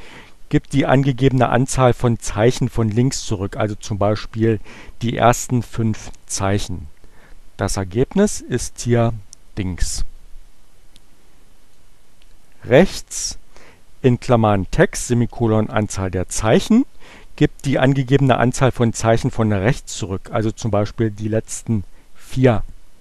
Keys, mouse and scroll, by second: 7.8 Return, 11.6-13.0 drag.